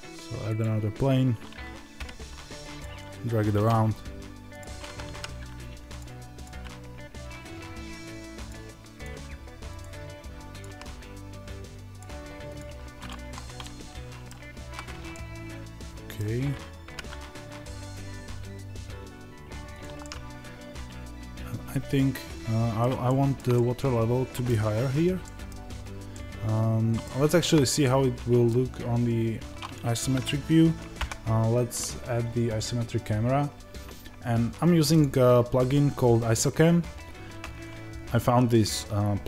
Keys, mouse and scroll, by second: 3.4 Tab, 4.4-5.9 drag, 6.4 g, 13.1 Tab, 13.5-19.7 middle drag, 14.2 z, 16.7 g, 19.7 click, 19.9-37.4 middle drag, 30.9 n, 37.4 ctrl+alt+shift+KP_Divide.